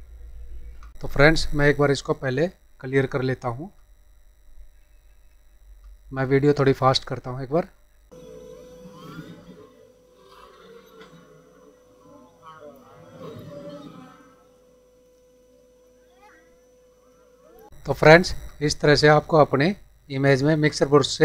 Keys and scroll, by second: 0.9 F9, 4.8 ctrl+=, 11.0 space, 13.2 space, 15.0 space, 15.1 ctrl+-, 15.8 space, 17.1 space, 17.4 space, 17.6 ctrl+=, 17.7 F9.